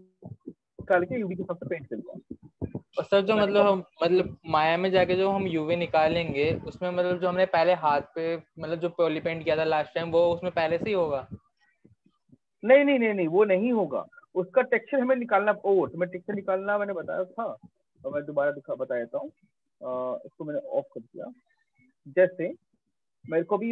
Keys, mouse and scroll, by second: 1.1 click, 14.2 click, 14.4 shift+click, 15.2 right click, 16.0 right click, 16.6 alt+click, 20.3 click, 23.2 alt+click.